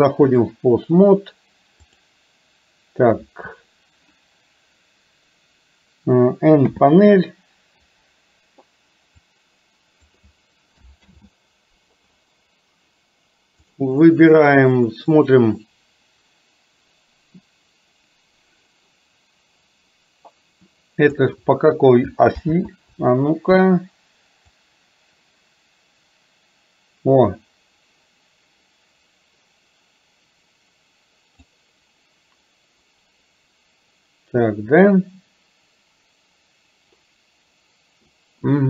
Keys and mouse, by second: 1.9 click, 6.7 n, 9.4 click, 11.2 ctrl+z, 15.2-21.2 drag, 22.4 ctrl+z, 24.7-31.6 drag.